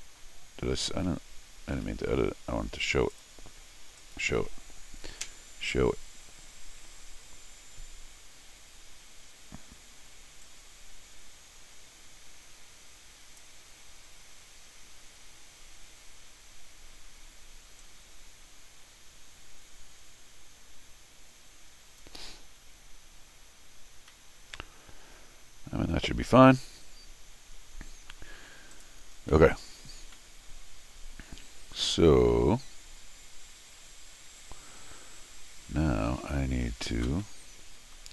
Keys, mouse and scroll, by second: 1.7 r, 3.1 click, 4.0 click, 7.0 middle click, 10.4-13.4 drag, 17.8-22.0 drag, 24.1 middle click, 24.5-25.8 middle drag, 26.1 scroll down 1, 26.1 r, 26.2-28.1 middle drag, 28.7 click, 29.3 middle click, 30.1-36.3 middle drag, 37.2 middle click.